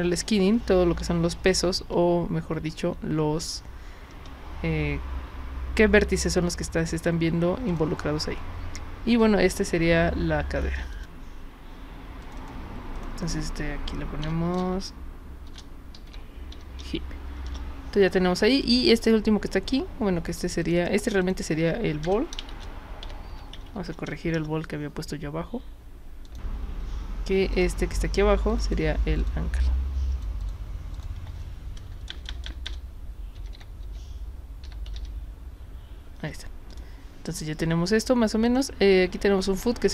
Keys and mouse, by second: 7.7 click, 10.9 click, 12.2 click, 12.4 click, 12.9 click, 14.2 BackSpace, 15.5 shift+-, 15.9 h, 16.5 i, 16.8 p, 17.5 Return, 18.6 click, 20.7 click, 20.8 click, 21.2 click, 22.1-24.1 typing, 24.4 Return, 26.3 click, 27.6 click, 28.5 click, 29.2 click, 29.7 click, 30.4 click, 31.0 click, 32.1-35.4 typing, 36.7 click, 38.5 click.